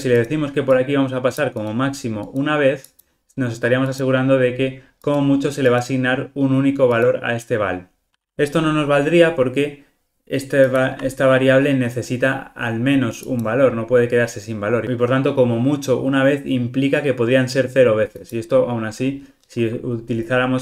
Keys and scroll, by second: 19.6 alt+super+[.